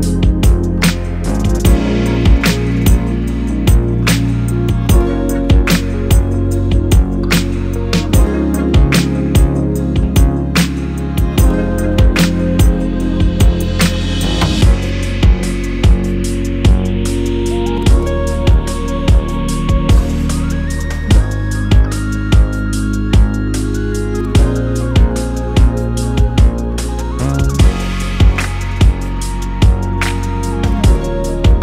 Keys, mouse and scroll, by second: 0.2 g, 0.5 click, 0.6 z, 0.8 scroll down 1, 1.5-1.8 scroll up 1, 1.8 2, 2.0 scroll down 1, 2.0 3, 2.4 scroll up 1, 2.6 click, 3.1-10.3 typing, 3.7 click, 4.6 Return, 5.5 scroll up 1, 5.9 click, 6.6 click, 6.7 click, 7.4 click, 7.7 click, 8.5 click, 9.7 click, 10.5 scroll down 1, 11.8 scroll down 1, 12.1 click, 12.6-18.0 middle drag, 12.9 KP_0, 13.0 scroll up 1, 13.2 z, 14.6-15.2 scroll up 4, 15.2 scroll down 2, 15.4 scroll up 2, 15.5 scroll down 2, 15.6 scroll up 2, 16.9 scroll down 2, 17.1 scroll up 2, 17.4 scroll down 2, 17.8 scroll up 2, 18.1 alt+click, 18.5 alt+shift+click, 18.6 alt+shift+click, 18.8 scroll down 1, 18.9 shift+middle click, 19.2 scroll up 1, 19.3 shift+click, 19.7 shift+click, 19.8 middle click, 20.1 scroll up 1, 20.4 click, 20.5 shift+middle click, 20.9 scroll up 2, 21.4 click, 21.7 ctrl+z, 22.0 shift+click, 22.1 shift+click, 22.2 scroll up 1, 22.3 shift+click, 22.4 shift+middle click, 22.8 shift+click, 23.1 Delete, 23.3 scroll down 1, 23.4-24.7 middle drag, 24.7 click, 24.8-25.2 scroll up 1, 25.2 click, 25.4 click, 25.6 scroll down 1, 25.9 scroll up 1, 26.4-28.4 middle drag, 26.6 KP_0, 26.9 scroll down 2, 27.4 z, 28.2 g, 28.4 click, 28.5 ctrl+z, 29.4 middle click, 29.5-29.9 scroll up 2, 29.9 click, 30.1 KP_0, 30.6 g, 31.1 click.